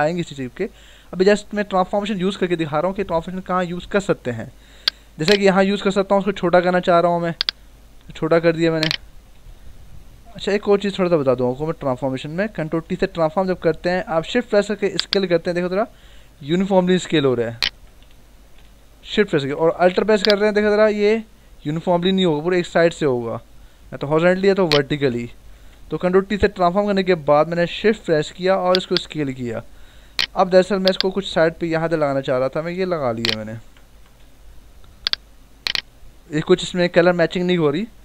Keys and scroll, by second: 5.8 ctrl+t, 9.4 z, 10.1 ctrl+z, 11.2 Escape, 12.6 ctrl+t, 18.4 Escape, 19.2 ctrl+t, 25.3 Escape, 26.2 ctrl+t, 33.8 Return.